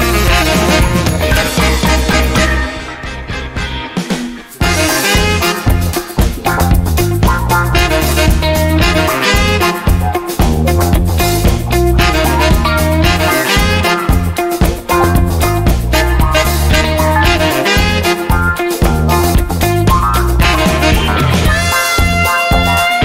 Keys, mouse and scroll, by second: 0.5 click, 1.1 click, 2.1 click, 3.5 click, 7.7 click, 9.4 click, 10.4 click, 10.7-14.8 typing, 11.2 click, 12.2 click, 12.9 click, 13.7 click, 14.5 click, 15.3 click, 17.1 click, 21.3 click.